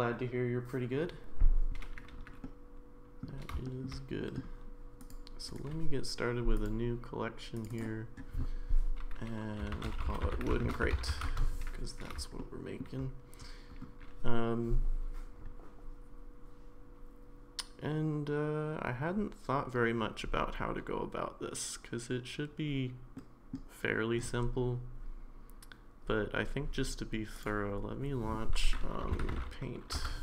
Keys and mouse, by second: 2.4-3.2 middle drag, 3.6 shift+middle drag, 4.2 middle drag, 5.1-5.6 drag, 5.6 right click, 7.5 click, 7.7-11.8 drag, 12.4-12.8 shift+middle drag, 23.2-23.5 middle drag.